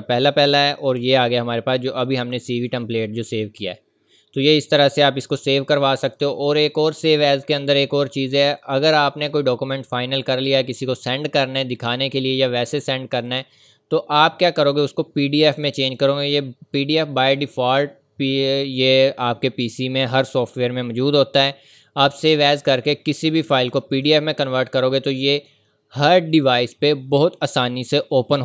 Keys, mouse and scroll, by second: 3.8 click, 4.4 scroll down 1, 4.8 scroll up 1, 6.0 click, 13.3 click, 22.6 click.